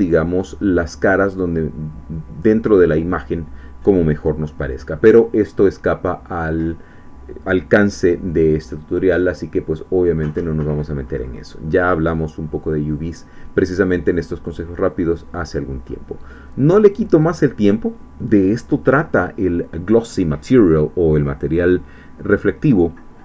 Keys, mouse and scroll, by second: 10.3 click, 11.2-15.7 middle drag, 15.8 scroll up 1, 16.4 scroll down 1, 16.7-19.0 middle drag, 19.0-19.4 scroll up 1.